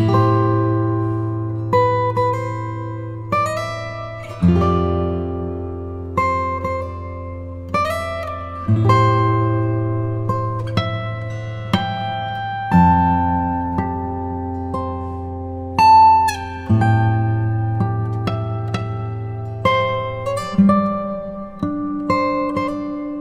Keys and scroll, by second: 5.7 v.